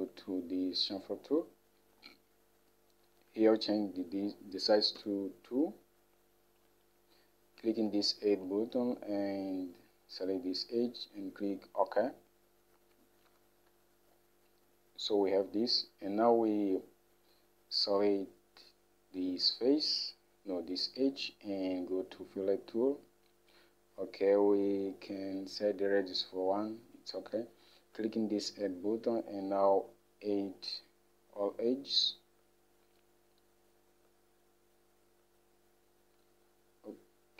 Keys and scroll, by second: 5.2 2, 13.5 Home.